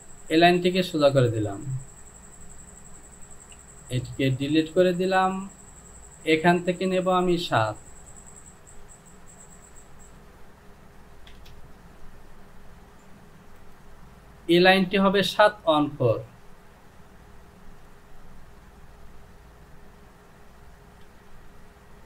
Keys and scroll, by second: 3.5 Delete, 11.4 Return.